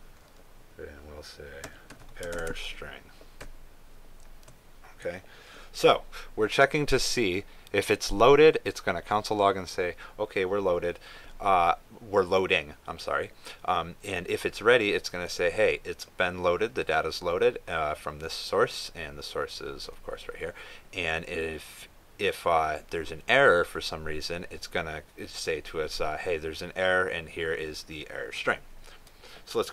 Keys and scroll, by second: 3.3 ctrl+space.